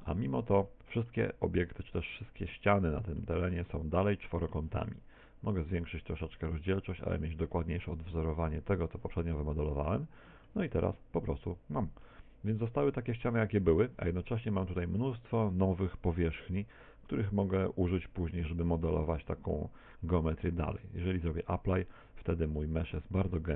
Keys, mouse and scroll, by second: 0.0 shift+middle click, 0.6 middle click, 5.5 click, 6.7 middle click, 8.5 click, 9.9 Tab, 10.3 middle click, 10.6 Tab, 10.9 middle click, 12.3 middle click, 21.3 click, 22.1 Tab, 22.7 middle click.